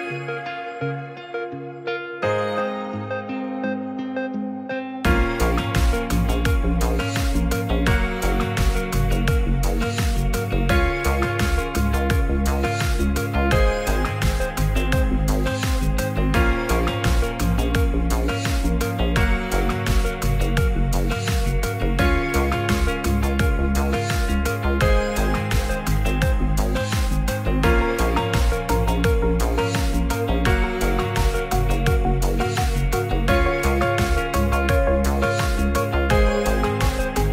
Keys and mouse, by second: 2.9 click, 5.0 e, 5.8 s, 8.0 click, 8.5 e, 8.7 click, 8.9 s, 9.7 click, 11.8 e, 13.0 click, 13.6 shift+middle click, 14.4 Tab, 16.6 click, 23.3 r, 29.6-30.3 ctrl+drag, 32.6-33.8 drag, 36.2 click.